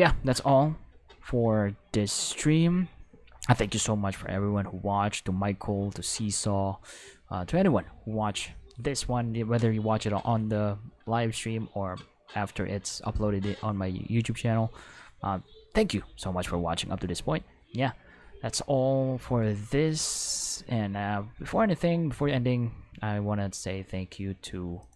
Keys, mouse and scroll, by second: 2.0 click, 24.8 click.